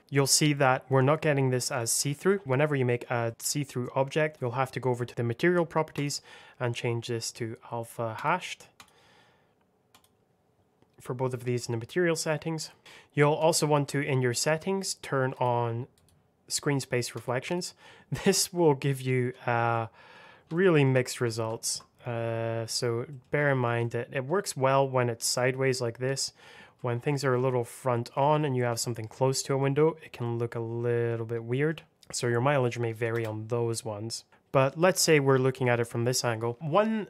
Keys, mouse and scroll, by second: 1.6 click, 1.7 scroll up 1, 2.4 click, 2.9-3.2 scroll down 1, 3.2 middle click, 4.3 click, 4.9 scroll down 1, 5.8 click, 8.0 click, 13.3 click, 18.4 middle click, 19.2-19.6 scroll up 1, 19.6 middle click, 20.0 scroll down 1, 20.4 shift+middle click, 20.7 shift+scroll down 2, 21.7 middle click, 23.4 shift+middle click, 23.7 middle click, 26.3 scroll up 1, 26.7 shift+middle click, 27.2 shift+middle click, 27.8 middle click, 28.3 shift+middle click, 28.7 scroll up 1, 28.7 middle click, 29.8-30.1 scroll down 1, 30.1 middle click, 31.2 scroll down 1, 31.4 middle click, 33.0 KP_0, 34.0 scroll down 1, 34.3 click, 34.9-36.0 scroll up 1, 36.8 scroll up 1.